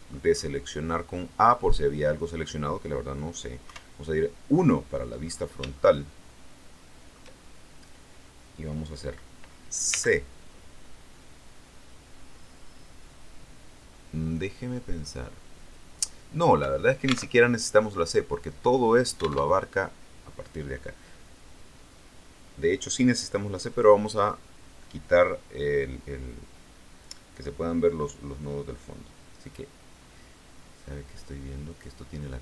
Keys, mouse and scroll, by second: 0.1-0.9 scroll down 1, 0.9-3.6 scroll up 1, 3.6 KP_1, 5.2-5.7 scroll up 1, 5.7-7.2 shift+middle drag, 9.8 c, 16.5 Escape, 17.2 alt+Tab, 19.3 alt+Tab, 23.6 click, 31.6 click, 31.9-32.4 middle drag.